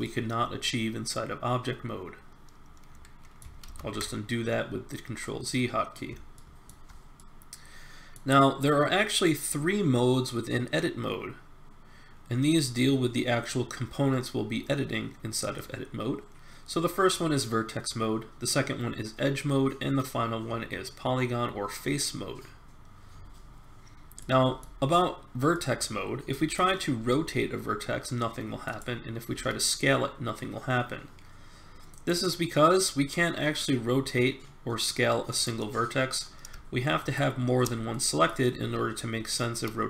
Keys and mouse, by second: 0.5-2.0 middle drag, 3.6 ctrl+z, 24.6-26.5 middle drag, 27.0 r, 29.3 s, 33.3 middle click, 33.9 middle click, 37.0 click, 37.0 right click, 37.9 middle click, 38.6 r.